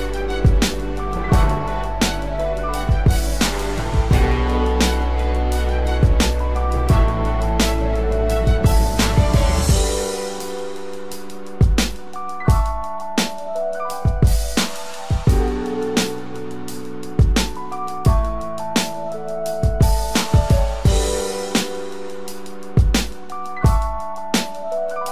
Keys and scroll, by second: 15.5 ctrl+-, 22.9 ctrl+0, 23.4 ctrl+=.